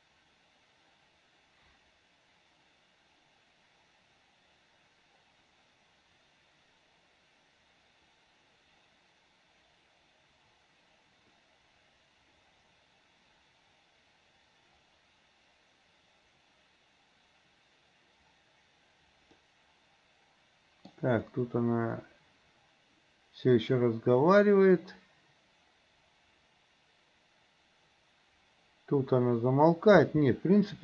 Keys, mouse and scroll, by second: 19.5-21.1 middle drag, 30.1 space.